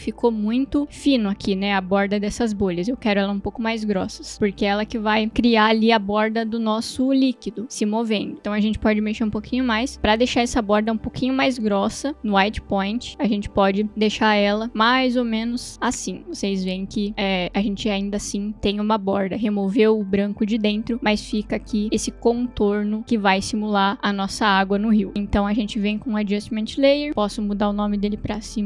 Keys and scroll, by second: 25.1 ctrl+z, 26.2 ctrl+alt+y, 27.1 Return.